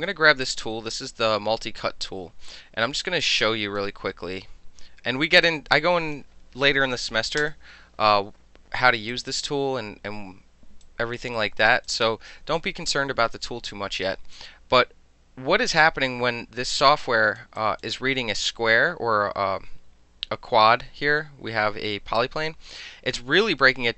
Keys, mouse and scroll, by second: 0.0 click, 3.2 click, 5.4 click, 9.1 click, 10.8 alt+click, 11.3 alt+right click, 11.8-12.3 alt+drag, 14.3-17.4 alt+drag, 17.6 alt+click, 22.2 alt+click.